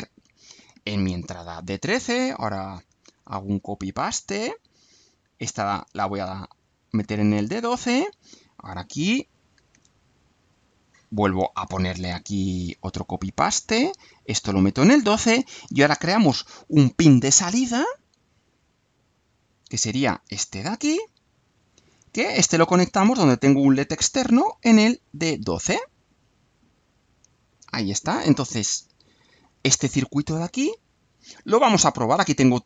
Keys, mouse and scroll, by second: 1.6-2.4 drag, 2.6 ctrl+c, 3.0 ctrl+v, 3.5-5.0 ctrl+drag, 5.2 click, 6.2 click, 6.9-7.7 drag, 7.9-8.6 drag, 9.2 ctrl+click, 9.7 ctrl+v, 10.2-11.7 ctrl+drag, 11.9 click, 12.3 click, 13.8 click, 14.8-15.9 drag, 17.4 click, 19.0 click, 20.4 click, 21.1 click, 22.4 click, 23.8 shift+d, 25.0-25.5 scroll down 2, 25.8 scroll down 2, 26.8 click, 27.5 right click, 29.2 click, 30.8 click.